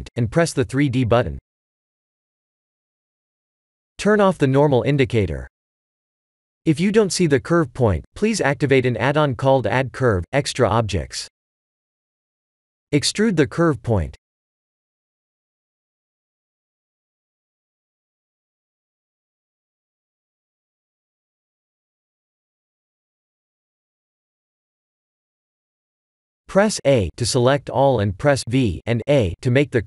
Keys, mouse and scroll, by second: 2.5 click, 4.2 click, 14.0 e, 16.5 e, 18.0 e, 19.0 e, 20.1 e, 21.0 e, 22.3 e, 23.1 e, 24.1 e, 25.5 Tab, 26.2 Tab, 26.8 a, 27.4 v, 27.9 Tab, 28.7 scroll up 4, 29.5 scroll down 1, 29.5 scroll down 2.